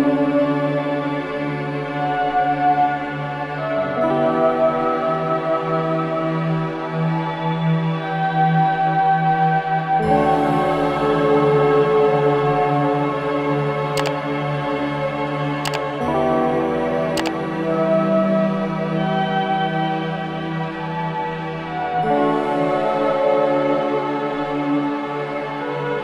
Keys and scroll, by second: 8.4 ctrl+j, 20.8 ctrl+j.